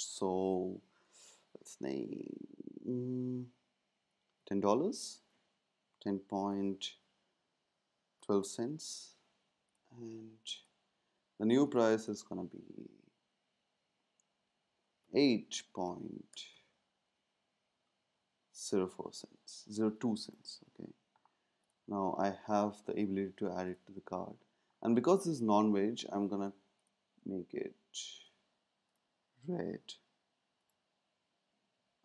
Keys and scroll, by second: 4.1-5.1 typing, 8.0-8.8 typing, 15.0 8, 16.3 BackSpace, 16.5 ., 18.2-19.1 typing.